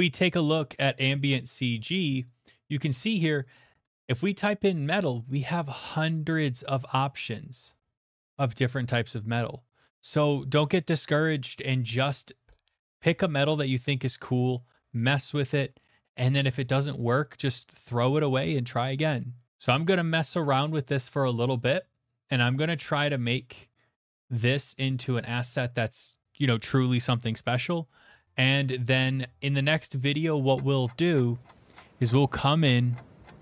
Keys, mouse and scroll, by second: 0.5 click, 1.2 typing, 3.1 click, 6.0 click, 6.0 middle click, 6.2-7.7 scroll, 8.7 scroll, 11.7 scroll, 14.1 scroll, 17.4 scroll, 18.3 scroll, 19.5 click, 19.5 middle click, 21.5 middle click, 21.7 middle click, 23.4 click, 25.2 middle click, 29.1 shift+middle click.